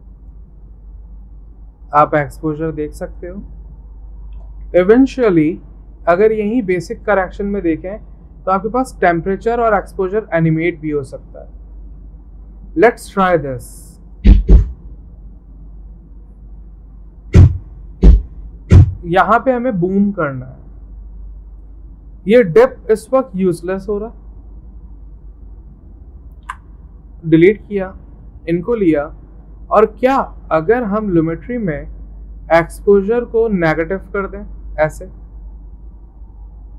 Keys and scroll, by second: 4.7 ctrl+z, 26.5 Delete.